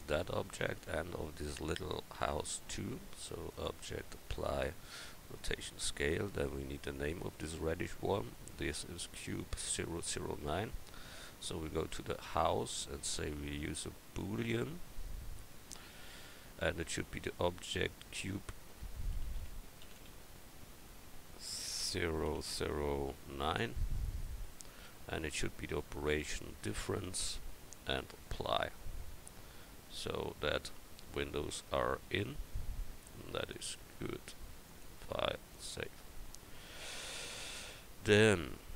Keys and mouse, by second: 15.7-20.7 drag, 22.5 0, 26.1-29.1 drag, 29.1-29.8 right drag, 31.5 middle click, 37.3 KP_1.